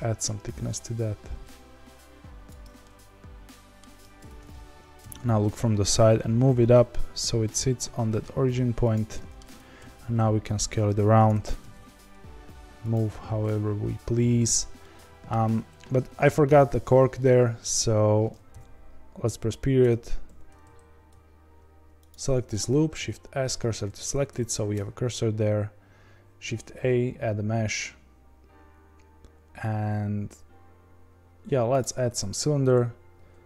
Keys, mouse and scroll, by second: 2.8-4.1 middle drag, 4.1 Tab, 5.0 KP_1, 5.5 a, 5.9 g, 9.1 middle click, 9.4 Tab, 9.7 s, 14.7-18.5 shift+middle drag, 18.5 KP_Decimal, 19.8 Tab, 20.2 2, 22.0 alt+click, 23.5 shift+s, 24.2 Tab.